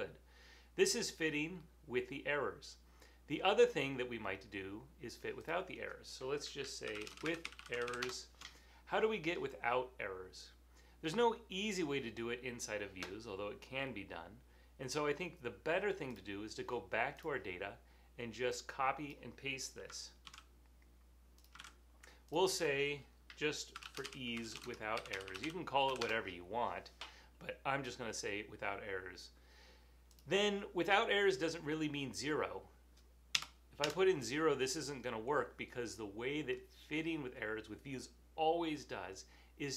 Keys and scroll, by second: 6.7-8.1 typing, 9.3-10.1 typing, 20.4 super+c, 21.7 super+v, 23.6-26.0 typing, 26.0 Return, 29.1 typing, 33.5 0, 33.9 Return.